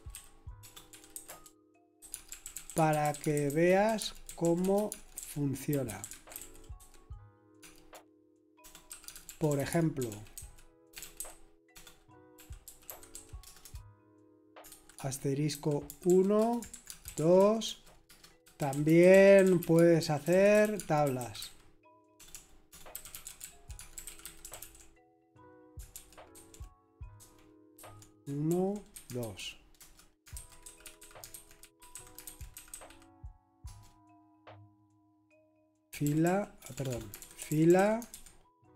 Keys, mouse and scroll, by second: 0.0-33.6 typing, 35.9-38.7 typing.